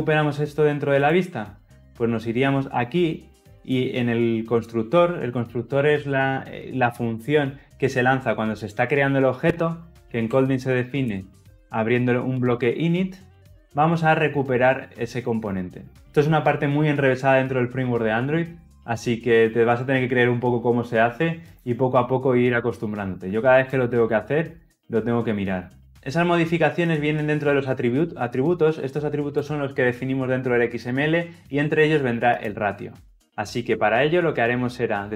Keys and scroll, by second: 12.0 Return.